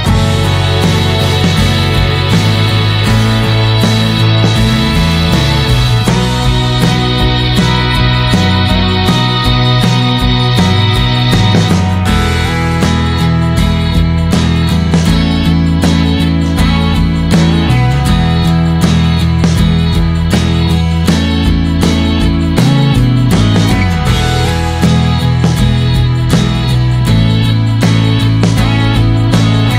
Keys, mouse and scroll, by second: 1.6 KP_0, 3.7-7.6 drag, 10.6 click, 13.9-15.8 drag, 18.3 scroll down 2, 18.5-20.2 middle drag, 20.2 click, 20.6 middle click, 21.3 click.